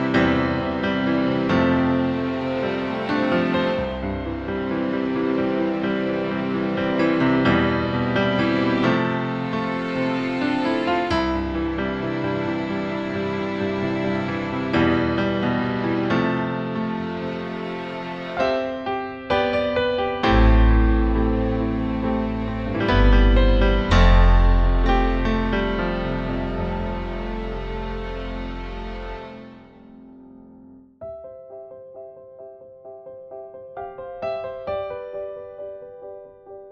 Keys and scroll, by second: 0.2 BackSpace, 2.1 e.